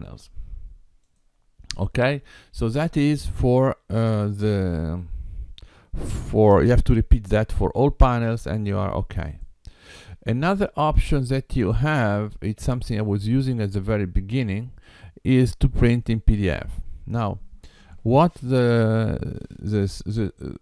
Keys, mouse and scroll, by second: 1.0 click, 4.1 click, 5.6 x, 9.2 click, 11.1 g.